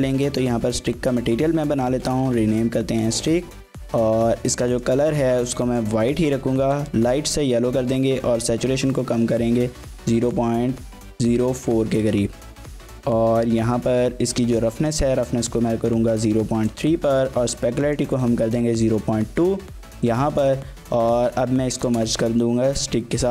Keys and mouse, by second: 4.7 click, 14.7-15.9 ctrl+drag, 16.8-18.0 ctrl+drag, 20.4 click, 23.2 ctrl+j.